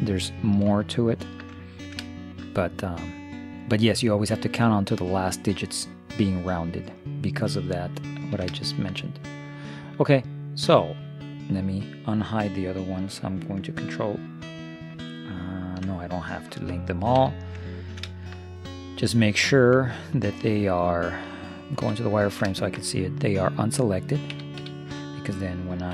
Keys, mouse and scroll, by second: 1.1-2.7 middle drag, 3.9-6.1 middle drag, 8.3 middle click, 12.7-15.0 middle drag, 17.2 a, 17.9-20.5 middle drag, 21.9 z, 22.3-24.8 middle drag, 24.4 a, 24.7 a.